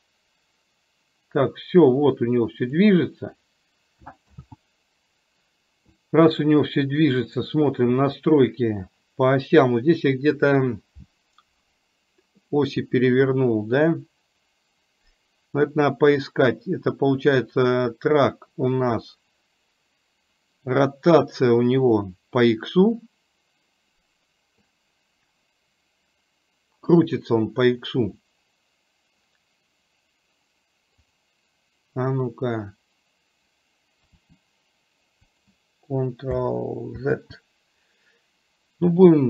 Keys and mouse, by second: 0.1-3.0 drag, 4.4 ctrl+z, 34.1 r, 37.0 ctrl+z.